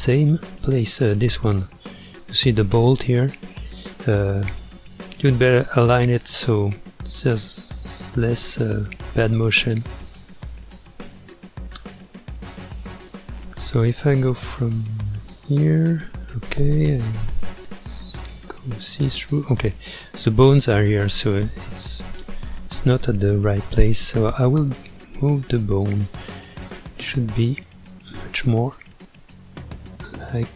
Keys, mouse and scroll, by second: 2.6-3.7 scroll up 2, 3.7-4.4 middle drag, 4.4 scroll up 1, 7.7-9.2 middle drag, 9.2 click, 10.4-11.9 middle drag, 11.9 click, 13.0-14.2 middle drag, 14.2 ctrl+KP_1, 14.8 ctrl+KP_3, 17.4 alt+z, 19.9-20.9 scroll down 5, 20.9 click, 25.8 click, 26.6 click, 29.3-30.5 shift+drag.